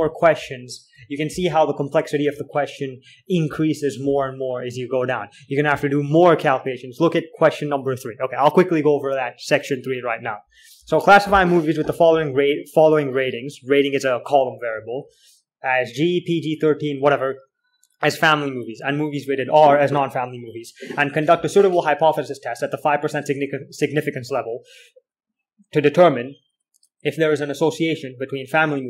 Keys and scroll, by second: 0.8-2.1 typing, 3.9 k, 4.4 j.